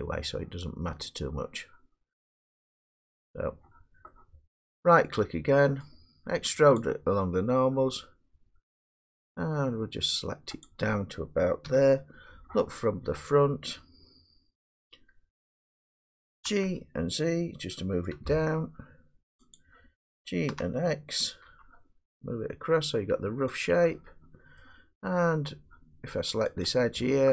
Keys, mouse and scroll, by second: 1.5-2.4 middle drag, 3.4-5.8 middle drag, 5.8 right click, 6.8 click, 10.6 click, 11.7 1, 11.9 click, 16.5 g, 18.2 z, 19.6 click, 20.5 g, 21.5 x, 23.6 click, 24.6 middle click, 26.7 click.